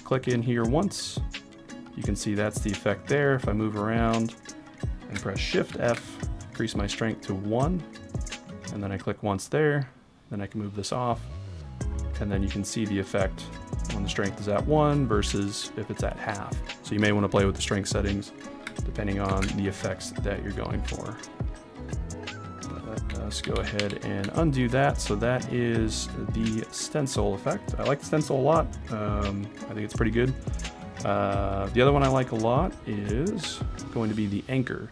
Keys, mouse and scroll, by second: 0.2 click, 5.7 shift+f, 6.9 click, 8.4 click, 9.9 right click, 19.3 shift+f, 21.6 click, 23.4 ctrl+z, 23.9 ctrl+z, 26.0 right click, 32.5-34.9 drag.